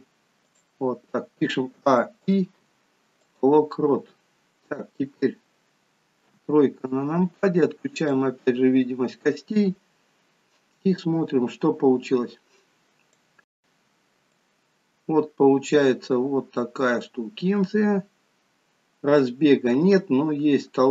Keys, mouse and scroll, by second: 2.0 a, 3.7 i, 4.3-4.9 scroll down 2, 4.9-5.4 scroll down 2, 6.5 KP_3, 8.1 click, 9.1-9.5 scroll up 1, 10.8 click, 14.3 click.